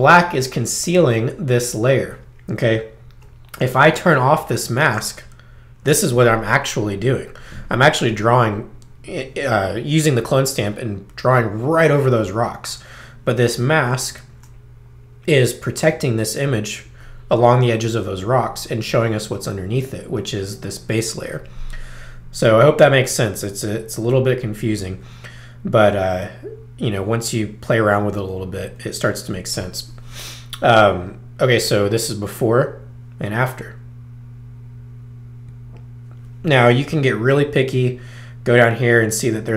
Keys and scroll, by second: 28.7 space, 36.8 z.